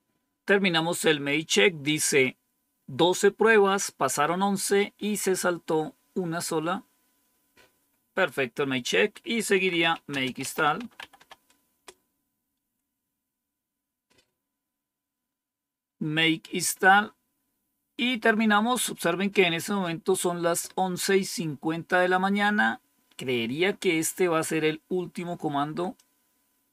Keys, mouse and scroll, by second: 9.2-11.5 typing, 11.6 Return, 25.8-26.7 drag.